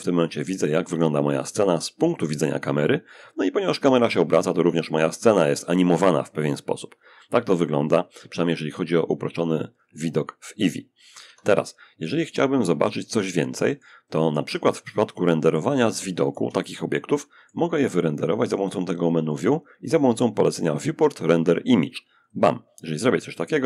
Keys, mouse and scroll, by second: 10.4 Escape, 12.0-14.9 drag, 14.9-17.2 shift+middle drag, 17.7 click, 21.4 click.